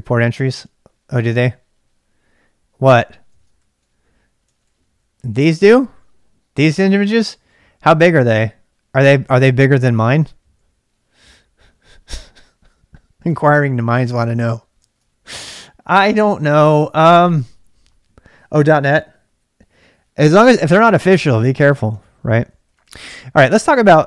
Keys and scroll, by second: 3.3 ctrl+[, 3.6-9.4 typing, 14.8-17.6 typing, 21.8-24.0 typing.